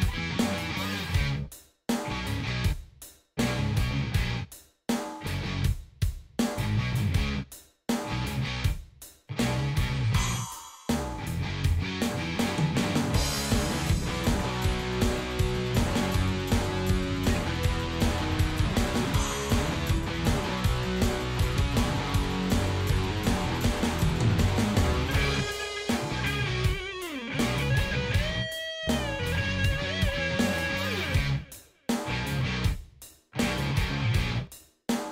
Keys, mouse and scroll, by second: 0.6 click, 3.4 click, 4.8 click, 5.6 2, 5.8 Return, 7.9 click, 8.7 click, 9.5 ctrl+KP_5, 12.9 click, 15.3 click, 16.2 click, 18.0-21.0 drag, 21.7 click, 22.0 click, 23.7 ctrl+s, 27.4 click, 28.8 click, 31.7 click, 34.9 click.